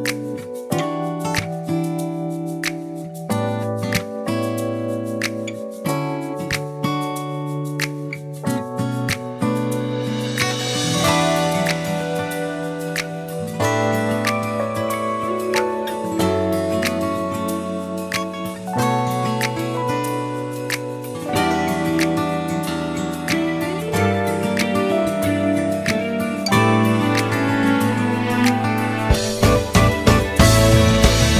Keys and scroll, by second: 0.0-1.0 typing, 5.5 a, 8.5-9.9 typing, 13.0 r, 13.3 ctrl+x, 13.4 ctrl+z, 14.0 e, 14.6 q, 19.9 F5, 20.5 w, 23.5 ctrl++, 24.3 ctrl++, 24.6 ctrl++, 24.8 ctrl+z, 25.0 ctrl++, 26.6 ctrl+z.